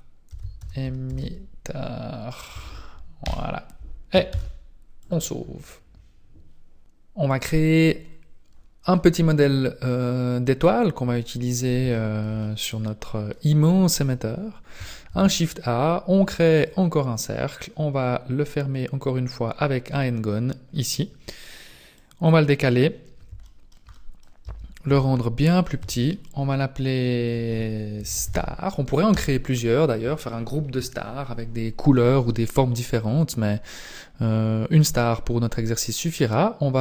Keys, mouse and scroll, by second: 8.5 scroll down 2, 8.9 middle click, 9.9 middle click, 10.7-11.7 scroll down 2, 11.9 shift+middle click, 12.4 middle click, 13.1 middle click, 14.2-14.5 scroll up 3, 15.1 shift+a, 21.9 click, 23.6 shift+middle click, 23.9 middle click, 24.5 Tab, 24.9 s, 25.8 Tab, 29.1 click.